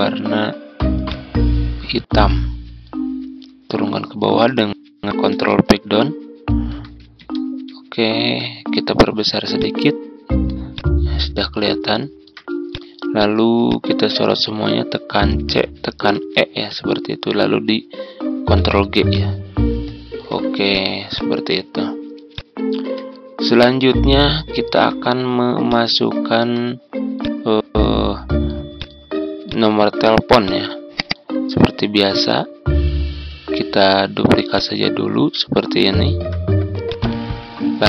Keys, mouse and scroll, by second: 5.8 ctrl+Page_Up, 7.1 ctrl+Page_Down, 9.5 click, 10.7-15.1 shift+drag, 15.3-16.0 typing, 18.5 ctrl+g, 19.0-22.1 drag, 24.5-24.8 ctrl+scroll down 1, 25.6 ctrl+click, 27.1-33.1 drag, 33.8 ctrl+d, 34.5-37.8 drag.